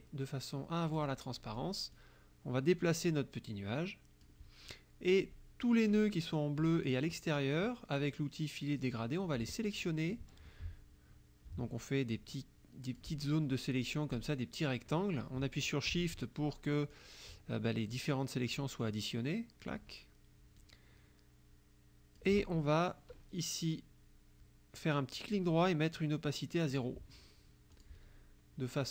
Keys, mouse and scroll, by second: 1.0 click, 1.4 click, 2.0-4.5 drag, 6.0 click, 8.9 click, 9.8 click, 12.1-13.2 drag, 14.3 shift+click, 17.0-18.7 shift+drag, 18.8-19.9 shift+drag, 20.6-22.4 shift+drag, 25.2 right click, 26.8 click, 27.8 click.